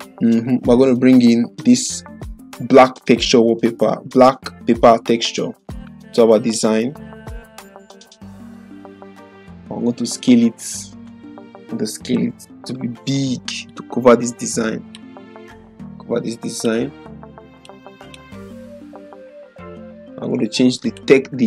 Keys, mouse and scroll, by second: 2.2-6.6 drag, 9.5-11.3 drag, 11.8 ctrl+-, 13.7-15.2 drag, 19.5 ctrl+0, 20.8 click.